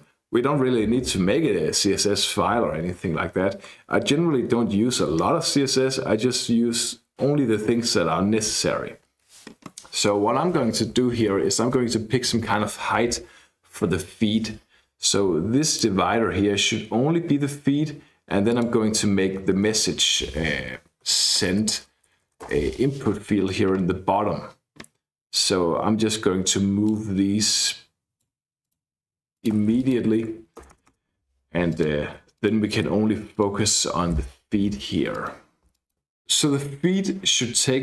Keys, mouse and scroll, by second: 3.6-4.4 scroll up 2, 4.4-5.0 scroll up 1, 5.1-5.8 scroll down 2, 5.9-6.7 scroll down 2, 15.6 click, 16.2-17.4 scroll down 2, 17.6-18.4 scroll up 2, 19.1-19.9 scroll down 2, 20.2-22.2 typing, 22.4 shift+Return, 25.3-27.2 drag, 27.5 click, 28.6 click, 29.3 click, 30.6 Return, 30.7 Return, 31.1 Return, 31.7 click, 32.1 BackSpace, 32.3 click, 32.8 BackSpace, 33.3 click, 33.6 BackSpace, 34.7 shift+., 35.1 click, 35.7 click.